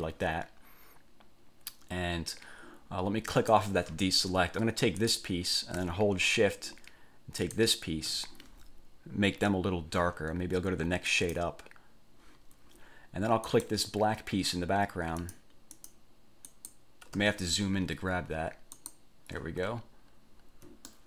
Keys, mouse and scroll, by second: 3.5 click, 5.2 click, 7.6 shift+click, 11.3 click, 13.7 click, 15.4 click, 15.9 click, 16.7 click, 17.5-18.1 ctrl+scroll up 2, 18.9 click, 19.7-20.1 ctrl+scroll down 2, 20.3 ctrl+scroll down 2.